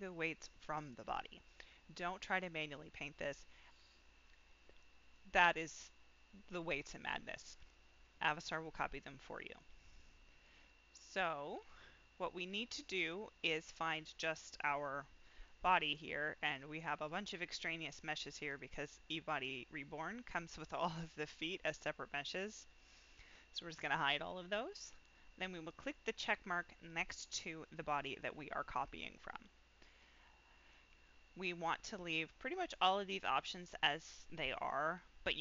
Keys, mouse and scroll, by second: 10.4 click, 11.5 click, 12.8-13.9 drag, 14.8-15.1 scroll down 1, 16.5-17.1 drag, 17.4 click, 17.9 click, 22.1 click, 25.6 click.